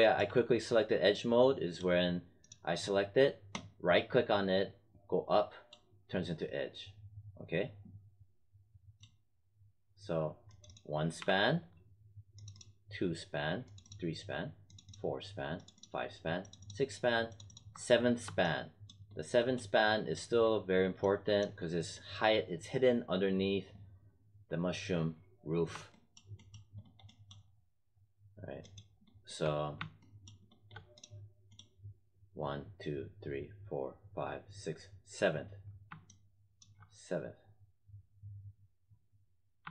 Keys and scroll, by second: 11.1 w.